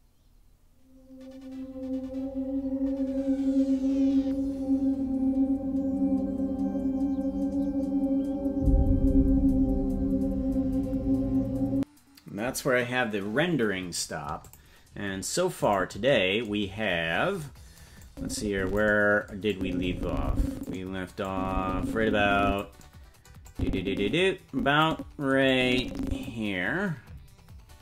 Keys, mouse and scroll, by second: 15.6 click, 16.7-17.4 scroll down 13, 18.0 click, 19.5-20.7 drag, 21.2-22.6 drag, 23.4-24.8 drag, 25.5 click, 26.4-27.8 scroll down 10.